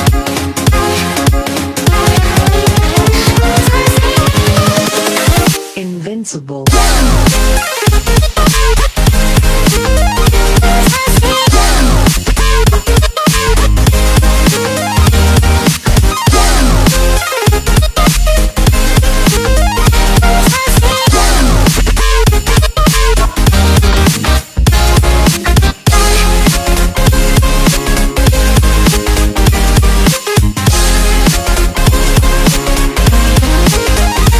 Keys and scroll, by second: 1.0 alt+space, 3.6 alt+space, 27.5 space.